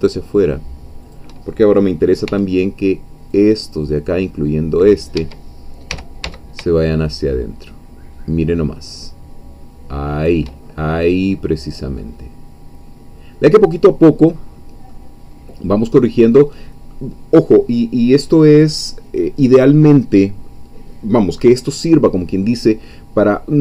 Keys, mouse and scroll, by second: 1.0 shift+click, 2.2 c, 3.3-5.1 drag, 5.2 Escape, 5.9 g, 6.2 x, 10.2 shift+click, 10.6-11.9 shift+scroll down 5, 12.1-15.0 middle drag, 15.4-16.4 scroll up 4, 16.4-18.0 scroll down 1, 18.0-23.6 scroll down 1.